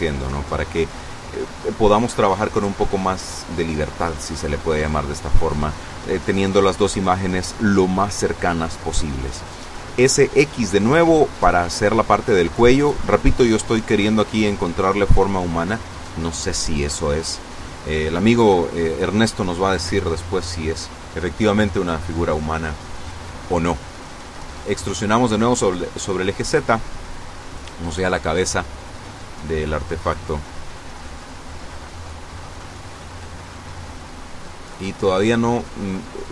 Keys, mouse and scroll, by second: 7.8-8.7 typing, 11.1 click, 11.7 a, 12.1 b, 12.7 click, 13.5-15.0 drag, 17.0 b, 17.5 click, 23.3 e, 25.7 click, 32.4 n, 34.4 click, 36.0 click.